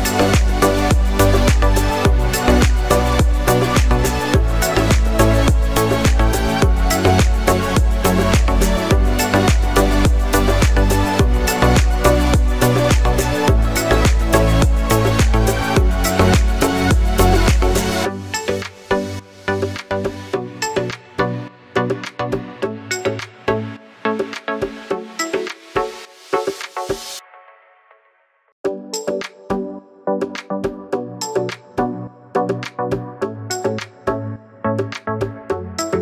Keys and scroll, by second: 9.1 Up, 9.1-9.5 Left, 9.7-10.0 Left, 10.3 Down, 10.4 Down, 10.5 Down.